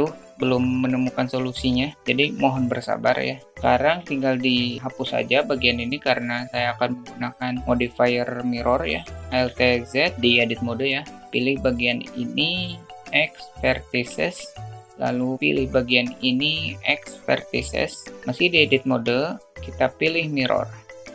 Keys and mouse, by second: 4.4 shift+middle click, 9.6 alt+z, 11.2 click, 13.0 x, 14.4 `, 15.5 click, 17.2 x, 19.4 click, 20.1-21.1 drag.